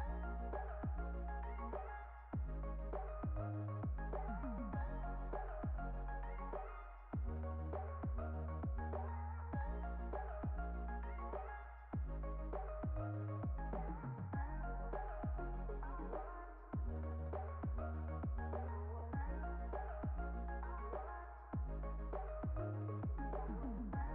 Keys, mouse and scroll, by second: 0.6 click, 3.0 s, 3.2 g, 3.7 click, 4.1-4.8 drag, 5.6 s, 6.3 g, 6.4 s, 7.1 click, 9.4 shift+click, 9.9 click, 10.9 click, 11.6 s, 11.8 g, 12.3 click, 12.9 click, 13.5 click, 13.9 click, 15.3-16.9 drag, 17.7 click, 19.2 click, 20.4 x, 21.8 click.